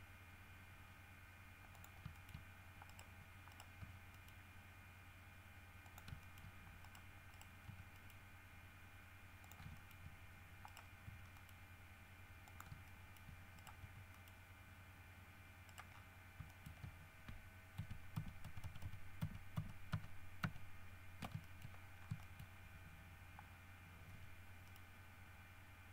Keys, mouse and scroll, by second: 1.9 click, 2.3 shift+middle click, 3.1 right click, 3.7 right click, 4.0 g, 4.3 middle click, 6.0 shift+click, 6.4 shift+middle click, 7.0 shift+right click, 7.5 right click, 7.8 g, 8.1 middle click, 9.6 shift+click, 9.9 shift+middle click, 10.9 right click, 11.2 g, 11.5 middle click, 12.7 shift+click, 13.1 shift+middle click, 13.7 shift+right click, 14.0 shift+g, 14.3 shift+middle click, 15.9 right click, 16.1-16.4 scroll down 2, 16.7 shift+middle click, 17.9 ctrl+z, 21.6 ctrl+shift+middle click, 21.9-22.9 ctrl+shift+scroll up 4, 22.4 shift+middle click, 24.3 g, 24.9 middle click.